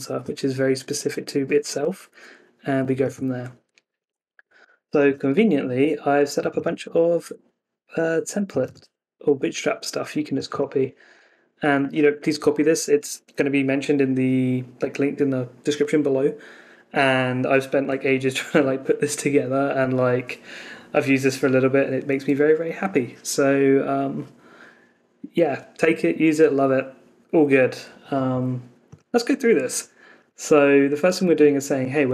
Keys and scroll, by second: 3.9 super+t.